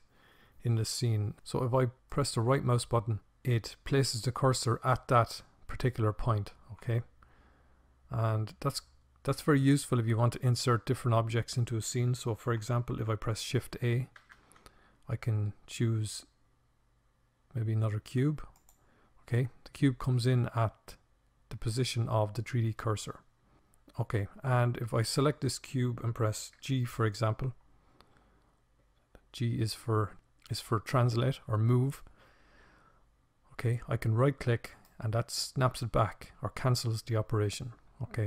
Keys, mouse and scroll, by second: 0.5-3.9 right drag, 12.3 shift+a, 23.2-24.6 right drag, 24.6 g.